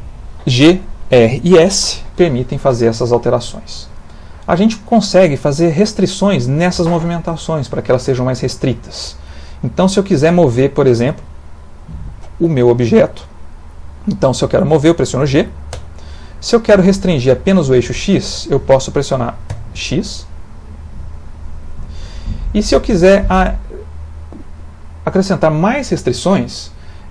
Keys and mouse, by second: 3.4 middle click, 5.9 middle click, 8.3 middle click, 10.5 middle click, 15.8 g.